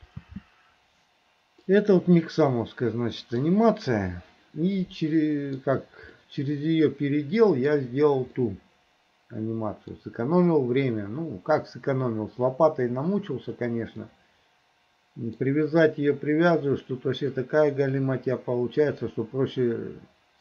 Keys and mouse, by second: 0.2 space, 1.7-3.5 middle drag, 4.8 middle click, 5.5 click, 6.2 click, 6.7 middle click, 7.2 click, 8.5-10.1 middle drag, 14.1-15.5 middle drag.